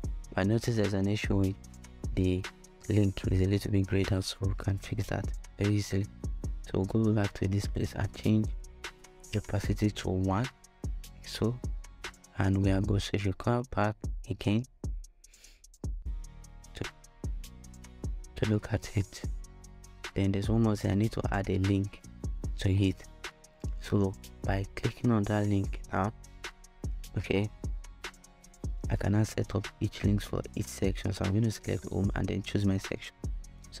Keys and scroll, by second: 10.1 Return.